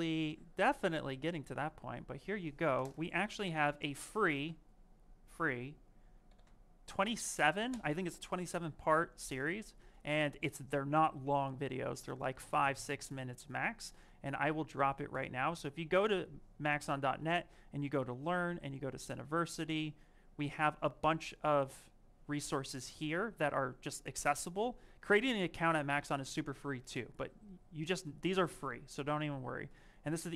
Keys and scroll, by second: 3.5 z, 7.5 Return.